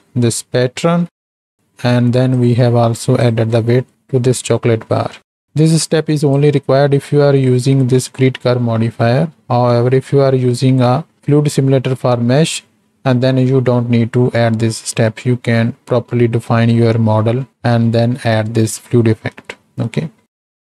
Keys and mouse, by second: 1.2 middle click, 2.3-3.2 drag, 5.5-6.5 drag, 17.6 middle click, 19.6 middle click.